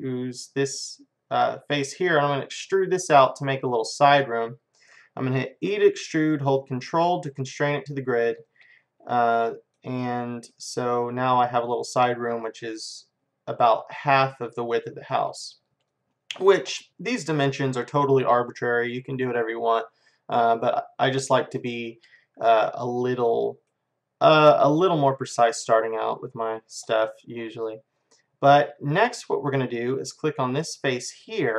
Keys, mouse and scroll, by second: 0.1-5.7 middle drag, 5.7 e, 8.5-17.8 middle drag, 19.1-21.1 middle drag, 21.8-23.7 middle drag, 23.8-29.4 middle drag, 30.2-31.5 drag.